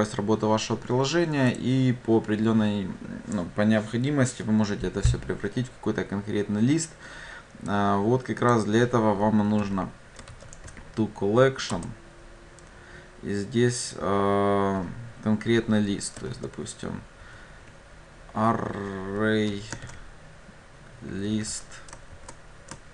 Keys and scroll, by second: 11.8 Return.